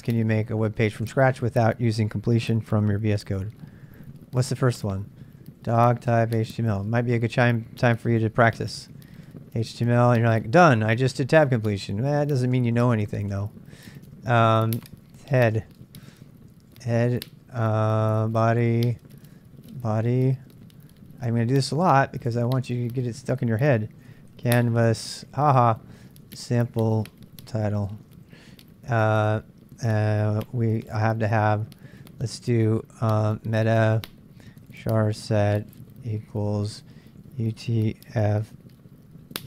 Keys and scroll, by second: 0.0-1.0 typing, 2.1-28.9 typing, 30.9 typing, 33.0-39.4 typing.